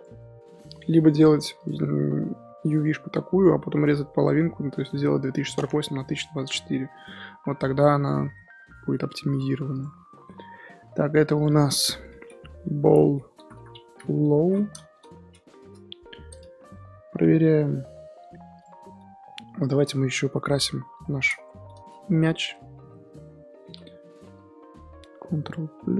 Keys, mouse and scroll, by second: 0.4-0.8 middle drag, 0.8 Tab, 1.2 Tab, 1.6 click, 8.3-9.7 middle drag, 9.7 click, 10.2-11.4 middle drag, 11.4-15.6 drag, 15.6 l, 16.3 click, 18.6 click, 18.8 scroll up 2, 19.7 click, 20.9 g, 22.3 shift+h, 22.8 Tab, 22.9 middle click, 23.1 scroll up 1, 23.6 3, 23.8 middle click, 24.0 scroll up 4, 25.8 ctrl+KP_Add.